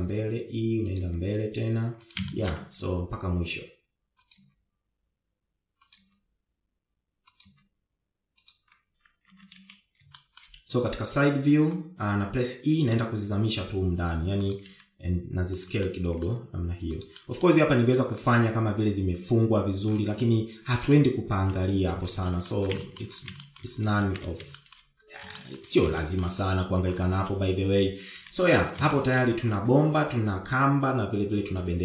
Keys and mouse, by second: 0.5 e, 1.7 e, 2.7 e, 4.0 shift+middle click, 6.1 e, 7.7 e, 9.1 e, 10.9 KP_3, 11.2 shift+z, 11.8 shift+middle click, 13.9 e, 16.4 s, 17.5 middle click, 18.0 g, 18.9 middle click, 19.2 Tab, 21.9-22.6 middle drag, 23.1 KP_1, 23.9 shift+middle click, 24.5 shift+middle click, 25.1 shift+middle click, 25.7 shift+z, 26.2 shift+middle click, 27.0 shift+middle drag, 27.6 shift+middle click, 29.8 shift+z, 30.6 shift+middle click.